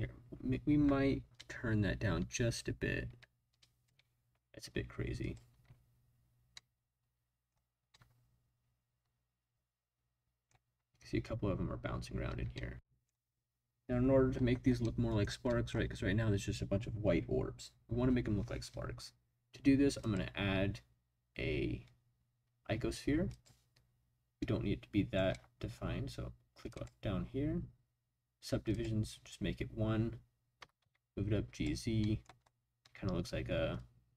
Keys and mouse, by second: 1.3-3.9 drag, 5.2 click, 5.5 space, 6.6-7.5 middle drag, 7.9-10.5 middle drag, 12.3 space, 12.5-13.2 middle drag, 14.8 middle click, 15.5 middle click, 20.1-23.5 drag, 30.6 g, 30.8 z, 31.5 click, 32.0 middle click, 33.8 click.